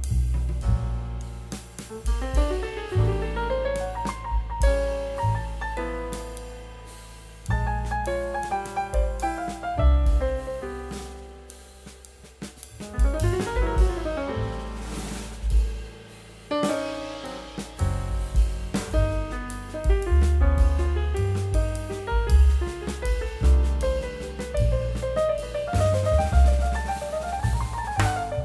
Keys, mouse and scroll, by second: 26.1 scroll down 1, 26.3 middle click, 26.8-27.1 scroll down 1, 27.3 middle click, 27.8 scroll up 1.